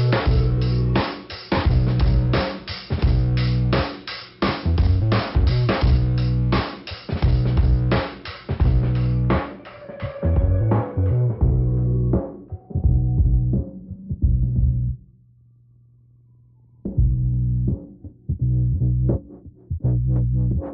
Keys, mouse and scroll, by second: 0.0 click, 2.3 right click, 4.9 click, 5.0 click, 5.3 click, 5.4 double click, 6.1 double click, 7.0 click, 8.0 click, 11.2 click, 15.1 click, 15.4 click, 16.0 scroll down 1, 16.6 click, 17.9 middle click, 19.3 click.